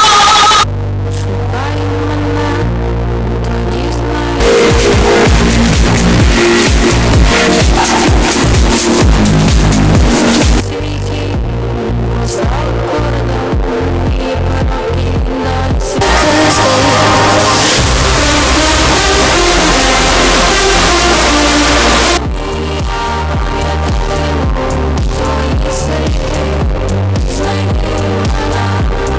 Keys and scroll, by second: 0.6 Page_Down, 10.5 Page_Down, 22.0 Page_Down.